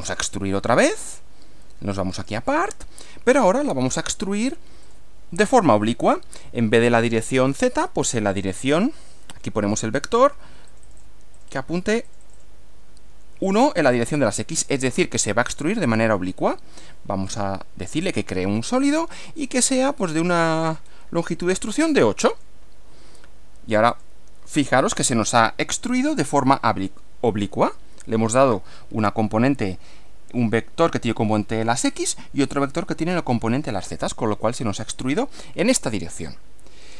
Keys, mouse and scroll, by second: 0.1 click, 1.1 click, 2.2 click, 4.9 click, 8.5 click, 9.9 1, 10.7 click, 11.4 click, 11.8 1, 12.1 click, 12.7 1, 13.5 click, 17.3 click, 18.8 click, 19.3-19.6 scroll up 1, 19.6 scroll down 2, 20.0-21.1 scroll up 5, 22.3 click, 23.9 click, 36.2-36.9 middle drag.